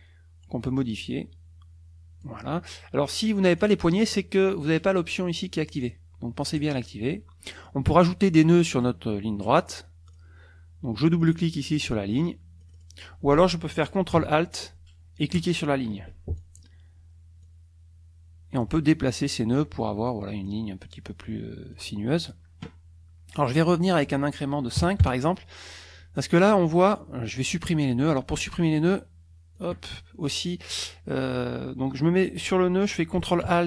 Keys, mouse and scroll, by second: 0.8-2.4 drag, 3.6 click, 5.8 click, 6.6 click, 7.4 click, 10.1 click, 11.2 click, 12.6 click, 15.3 ctrl+alt+click, 16.4 ctrl+alt+click, 17.4-18.8 drag, 20.1 click, 21.7 click, 23.7 click, 24.8 KP_5, 25.0 KP_Enter, 26.9 click, 28.1 click, 29.5 click.